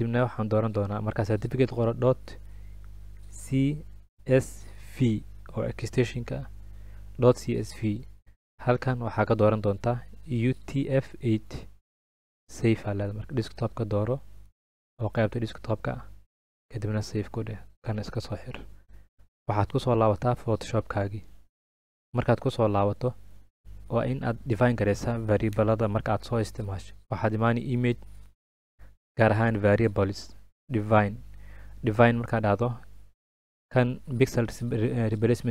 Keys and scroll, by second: 4.1-5.0 typing.